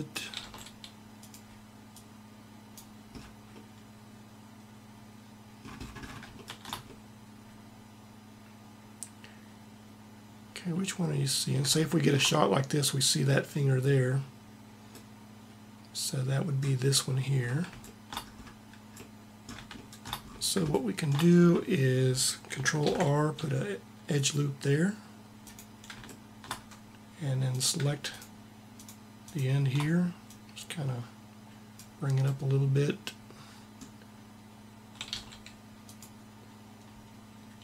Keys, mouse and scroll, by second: 0.0 r, 1.6-2.9 drag, 2.9-6.2 middle drag, 11.6-14.6 middle drag, 22.5 ctrl+r, 23.1 click, 23.9 ctrl+r, 27.1 click, 30.1-31.4 drag, 31.7-33.1 middle drag, 34.8 r, 37.2 g.